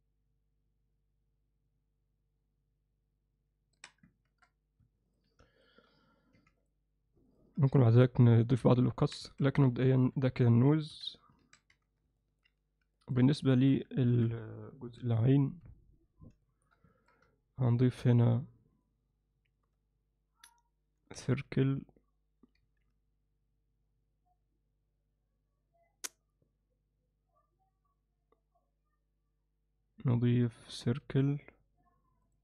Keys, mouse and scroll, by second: 6.4 3, 7.7 alt+middle click, 9.0 alt+middle click, 10.0 Tab, 10.0 KP_Divide, 10.9 KP_1, 11.4 alt+a, 11.7 z, 12.2 ctrl+middle click, 12.3 ctrl+alt+click, 13.0 ctrl+alt+middle click, 13.5 alt+shift+middle click, 14.0 ctrl+alt+middle click, 15.1 alt+shift+middle click, 16.5 alt+shift+middle click, 16.9 ctrl+middle click, 21.2 shift+a, 31.0 shift+a.